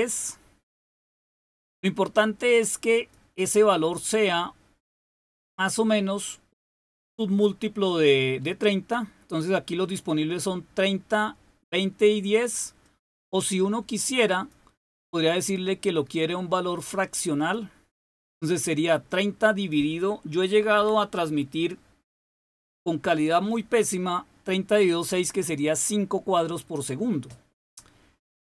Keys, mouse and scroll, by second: 2.9 click, 3.6-12.9 drag, 14.2 click, 17.3 click, 19.0 click, 20.7 6.